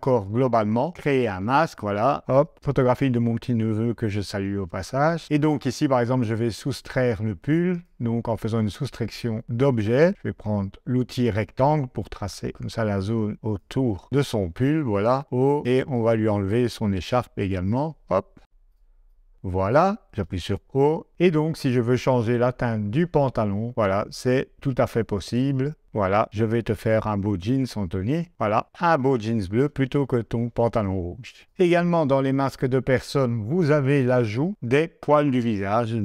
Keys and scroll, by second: 2.3 o.